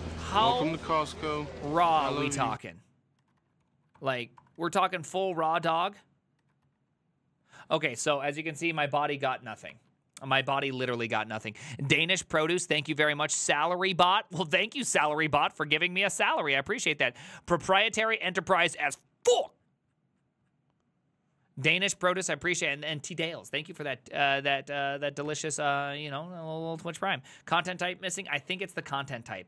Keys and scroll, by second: 0.0-2.6 typing, 2.6 Up, 3.2 ctrl+a, 3.7 ctrl+c, 3.8 ctrl+c, 4.0 Up, 4.4 Return, 4.6 ctrl+a, 4.8 ctrl+a, 5.7 Return, 6.5 ctrl+a, 6.7 ctrl+a, 9.8 alt++, 23.8 alt+f, 25.3 alt+f, 27.7 alt+{, 28.7 ctrl+a, 29.1 4.